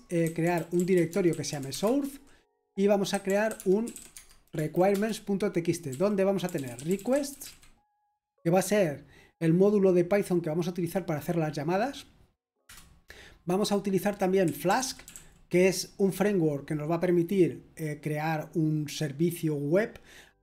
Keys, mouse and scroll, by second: 0.0-7.9 typing, 9.0-9.7 typing, 14.2-15.6 typing.